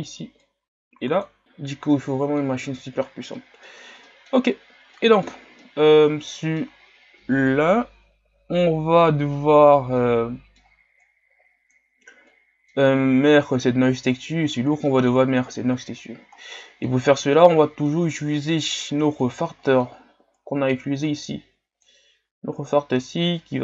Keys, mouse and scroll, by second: 2.0-17.5 middle drag, 17.5-20.6 drag.